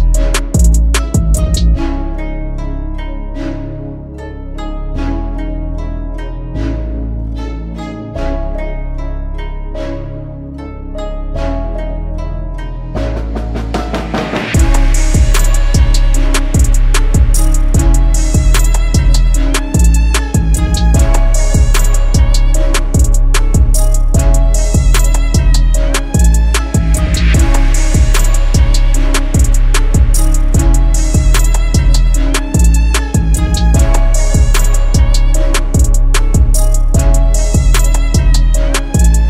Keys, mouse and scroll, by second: 16.8-17.4 typing, 19.4 [, 19.8 [, 19.9 [, 23.0 double click.